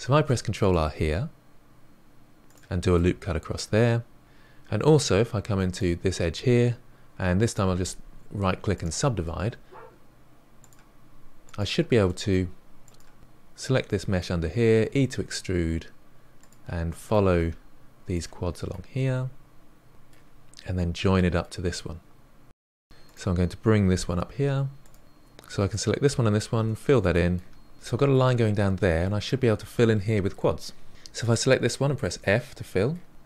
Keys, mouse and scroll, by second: 0.1 ctrl+r, 2.9-4.2 middle drag, 5.5 2, 5.6 click, 7.4-10.4 right drag, 10.6 click, 11.4 click, 12.0 middle click, 12.8 click, 13.2 middle click, 13.5 click, 13.8 middle click, 14.1 e, 14.8 middle click, 15.0 e, 15.4 middle click, 15.5 e, 16.2-17.9 shift+middle drag, 18.1 scroll down 1, 18.3-19.3 middle drag, 19.6 g, 20.6-21.7 middle drag, 22.8 1, 23.0 click, 23.9 g, 25.0 click, 25.6 shift+click, 26.5 f, 27.1-28.2 middle drag, 28.2-28.6 scroll up 2, 28.6-31.0 middle drag, 31.0 click, 31.6 f, 32.0-32.6 middle drag, 32.6 f.